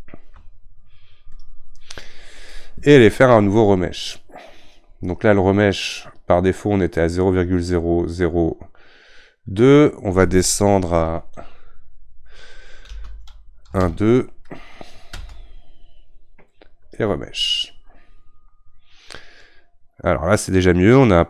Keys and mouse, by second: 1.4 ctrl+Tab.